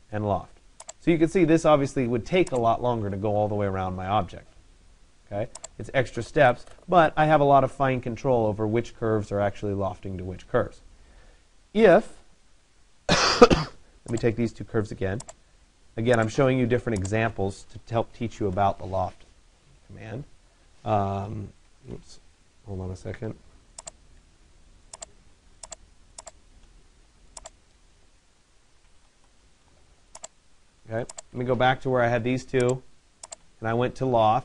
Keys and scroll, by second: 18.1 Return, 28.8 Return.